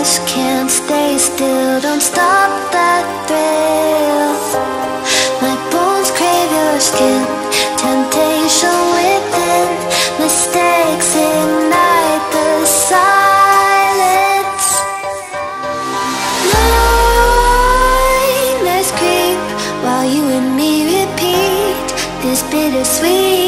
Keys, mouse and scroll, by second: 4.8 Right, 6.8-16.2 drag, 16.5-19.0 drag, 19.7 space, 19.8 click, 21.6 shift+Down, 23.4 click.